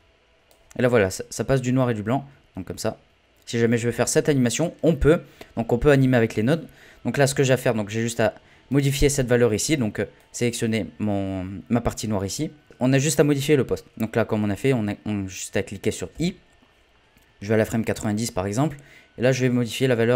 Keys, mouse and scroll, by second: 0.9 middle click, 1.8-12.7 drag, 17.6-20.1 drag.